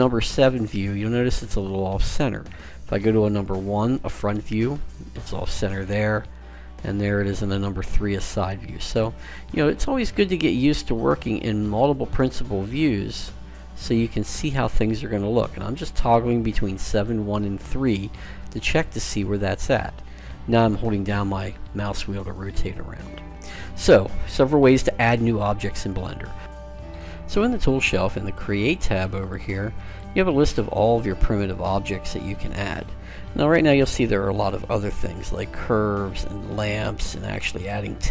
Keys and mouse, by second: 2.3 KP_1, 5.8 KP_3, 8.8 click, 9.3 KP_1, 11.1-13.5 typing, 14.6-17.0 typing, 28.4-31.8 drag, 31.6-34.2 middle drag.